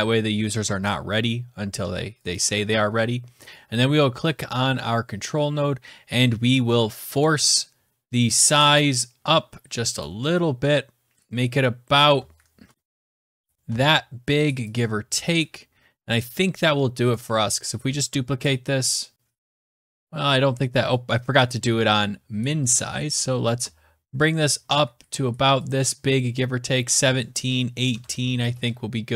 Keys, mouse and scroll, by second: 2.2 click, 3.3 click, 3.8 scroll down 5, 3.9-5.7 scroll, 6.9 click, 7.3 click, 8.3 click, 8.6 click, 9.8 click, 14.5 click, 16.9 click, 17.7 ctrl+d, 19.3 ctrl+z, 19.9 click, 21.3 click, 21.5 ctrl+z, 25.3 click, 26.8 click, 27.4-28.3 typing.